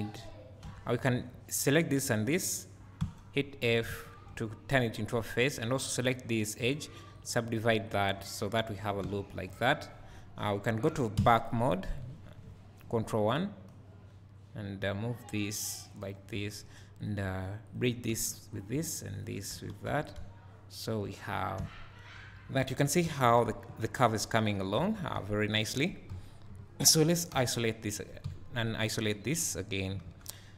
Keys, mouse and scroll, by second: 0.6 2, 1.0 click, 2.0 shift+click, 3.0 f, 3.9 alt+a, 4.3 1, 5.2 2, 5.5 click, 8.0-9.5 right drag, 8.2 1, 9.0 alt+a, 9.5 click, 11.2 ctrl+KP_3, 12.0 ctrl+KP_1, 13.7-17.0 drag, 16.4 2, 17.7 shift+click, 18.1 f, 18.6 click, 19.2 shift+click, 19.6 f, 19.9 Tab, 21.2 scroll down 1, 22.7 scroll up 1, 24.8 Tab, 26.1 KP_1, 26.5 KP_3, 28.2 KP_1, 28.6 KP_3, 29.5 middle click.